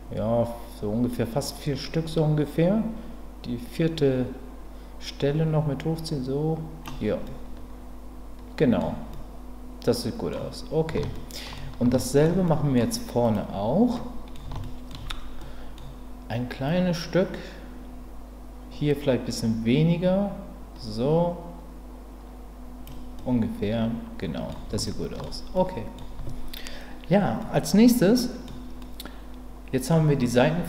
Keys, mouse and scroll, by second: 7.3-8.8 middle drag, 9.1-10.3 middle drag, 11.1 shift+middle click, 12.0 ctrl+middle click, 12.4 middle click, 14.0 middle click, 14.6 shift+middle click, 15.4 middle click, 16.7-22.8 drag, 23.2-24.5 middle drag, 24.8 shift+middle click, 25.6 middle click, 27.5-28.5 middle drag, 28.8-29.9 middle drag.